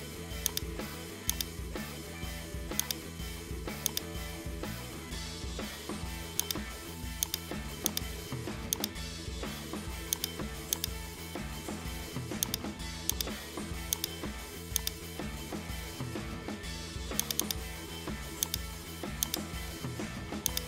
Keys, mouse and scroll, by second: 1.3 click, 1.6 g, 3.9 click, 4.4-4.7 shift+middle drag, 4.7-6.2 scroll, 6.4 shift+click, 7.2 right click, 7.9 shift+right click, 8.8-10.3 drag, 10.8 right click, 12.4 click, 13.1-14.6 drag, 14.8-16.3 drag, 17.2-18.7 drag, 19.2 right click, 19.7 g.